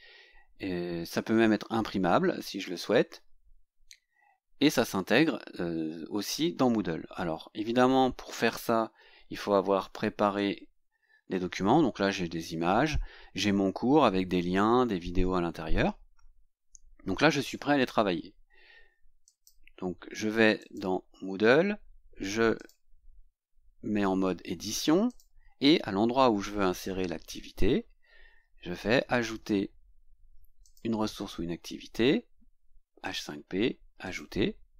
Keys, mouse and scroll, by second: 9.5 Tab, 10.4 Tab, 19.3 click, 20.6 click, 22.6 click, 25.1 click, 26.5-29.6 scroll down 18, 30.6 click, 33.0 click, 34.0 click.